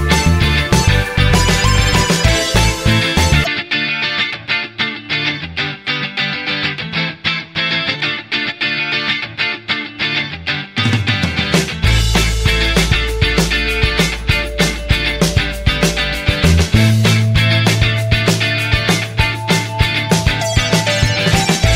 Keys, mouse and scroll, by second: 3.7 6, 16.4 1.